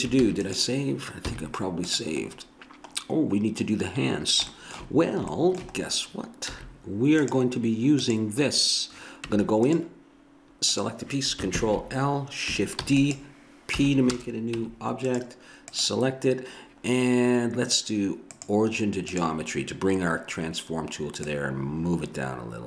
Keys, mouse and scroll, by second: 0.2 ctrl+s, 1.3 z, 4.7-6.1 middle drag, 6.5 z, 9.2 Tab, 11.6 ctrl+l, 12.9 shift+d, 13.8 p, 14.6 Tab, 18.3-21.1 drag, 21.2 click.